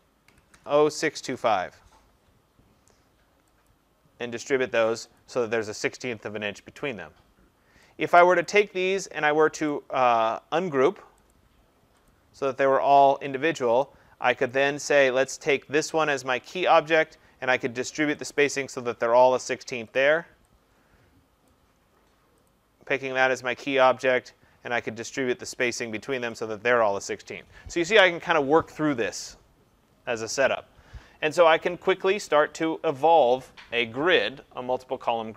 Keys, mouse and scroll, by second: 0.0-1.3 typing, 3.7 click, 5.2 click, 8.5 click, 9.7 right click, 11.3 click, 12.1 click, 14.5 click, 15.5 click, 21.5 click, 22.5 click, 25.6 click, 26.4 click.